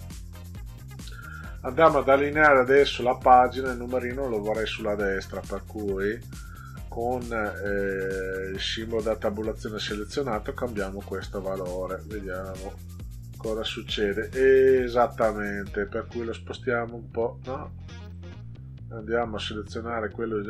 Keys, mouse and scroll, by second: 7.1 click, 8.4 click, 9.6 click, 11.2 click, 12.6 click, 16.3-18.1 drag, 19.4-20.4 drag.